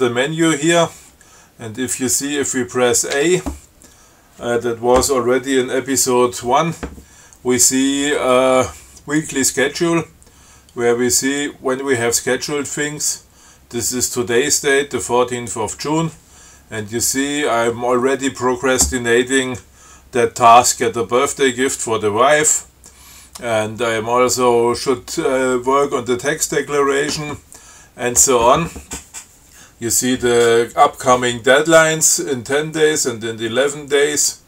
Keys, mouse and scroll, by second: 3.4 a.